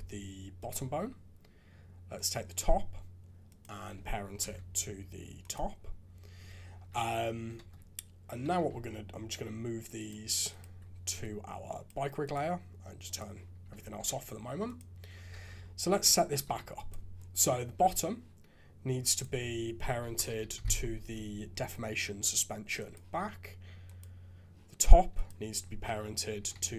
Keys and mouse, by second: 2.1 click, 3.6 click, 4.4 ctrl+p, 6.7 alt+a, 7.6 ctrl+Tab, 8.6 alt+a, 9.9 click, 10.5 ctrl+click, 11.3 click, 13.6 alt+a, 14.1 shift+z, 14.6 click, 15.3 shift+z, 15.9 Tab, 16.4 alt+a, 19.3-22.9 drag, 25.1-26.7 drag.